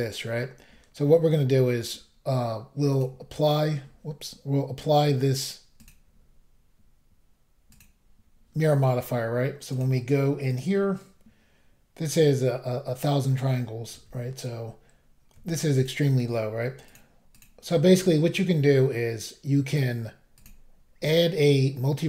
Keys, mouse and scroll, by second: 2.9 click, 3.0 click, 5.8 click, 5.9 click, 7.7 click, 7.8 click, 9.7 click, 9.8 click, 10.5 click, 10.6 click, 13.9 a, 15.8 click, 15.8 click, 16.9 click, 16.9 click, 17.3 click, 17.4 double click, 20.4 click, 20.5 click.